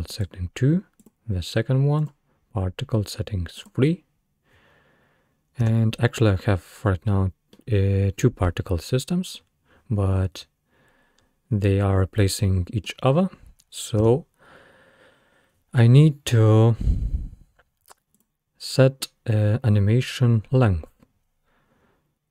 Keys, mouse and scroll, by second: 0.3-1.1 drag, 2.0 click, 3.7-5.1 drag, 5.6 space, 7.6-10.6 middle drag, 12.4-14.1 middle drag, 14.1 space, 18.2 click.